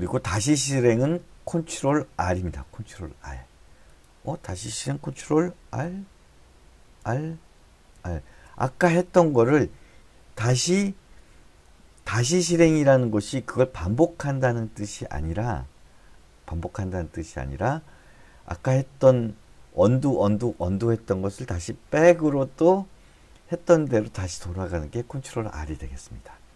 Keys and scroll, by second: 6.3 ctrl+r, 7.4 ctrl+r.